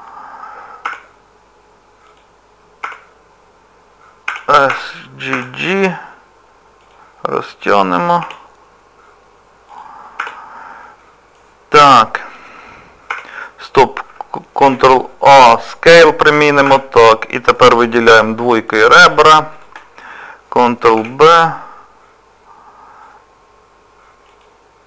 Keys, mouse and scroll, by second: 2.8 Tab, 4.3 s, 8.2 g, 10.2 Tab, 10.7 scroll up 1, 10.8 middle click, 11.8 Tab, 13.1 Tab, 14.6 ctrl+a, 16.7 Tab, 17.0 middle click, 18.1 2, 18.6 click, 19.5 shift+click, 21.0 ctrl+b.